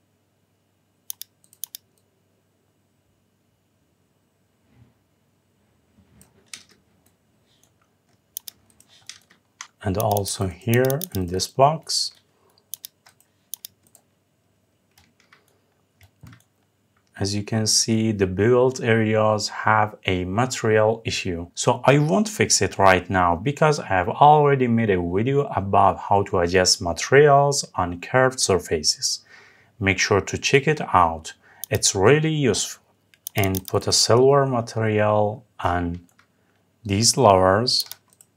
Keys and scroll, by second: 8.9 Escape.